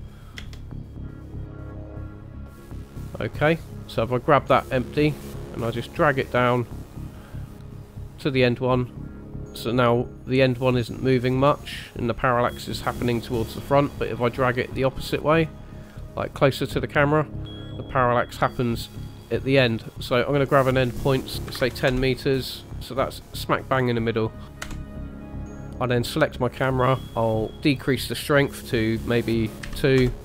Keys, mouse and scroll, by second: 0.5 space, 4.0 scroll down 1, 4.0 KP_0, 4.0 click, 5.2 click, 20.7 click, 22.9 middle click, 22.9 scroll down 3, 23.7-24.5 scroll up 2, 24.5 middle click, 24.9 KP_0, 25.7 click, 27.1 click.